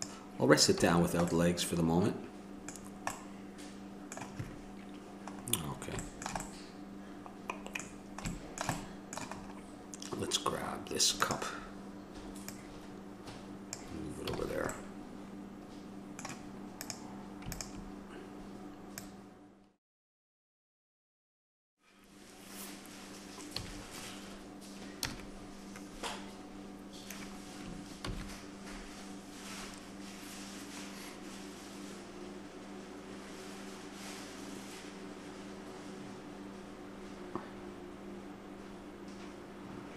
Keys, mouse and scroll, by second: 1.0 a, 1.2 click, 4.5-6.5 middle drag, 6.7 middle click, 8.1-11.5 middle drag, 11.5-13.9 right drag, 14.5 a, 15.0-17.1 middle drag, 17.1-23.8 right drag, 23.8 a, 25.3 KP_0, 29.1 shift+z, 36.5 middle click.